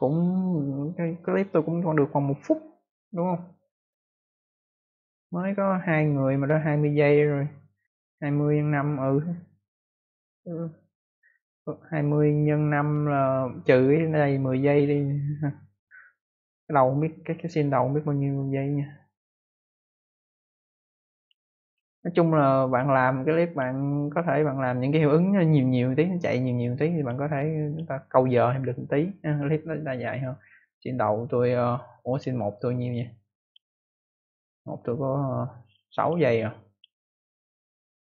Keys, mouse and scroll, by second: 20.2 click, 21.1 click, 26.9 click, 27.6 click, 28.2 click, 29.3 click, 32.8 click, 32.9 click, 33.3 click, 36.6 click, 36.7 click, 37.8 click.